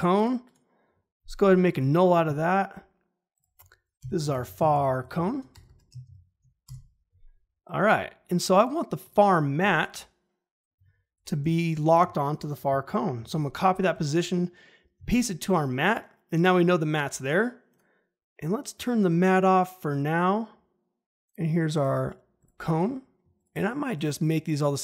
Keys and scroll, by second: 4.0 Return, 4.1-6.0 typing, 6.6 Return, 11.4 p, 13.1 ctrl+c, 14.9 ctrl+v.